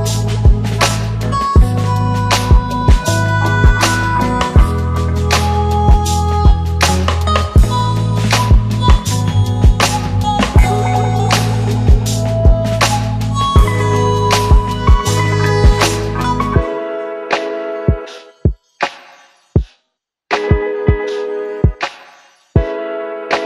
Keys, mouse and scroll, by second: 7.1 click, 7.4 shift+Down, 9.1 click, 9.3 shift+Down, 10.4 click, 10.6 shift+Down, 11.8 shift+Up, 13.0 click, 14.3-19.2 click, 21.7 click.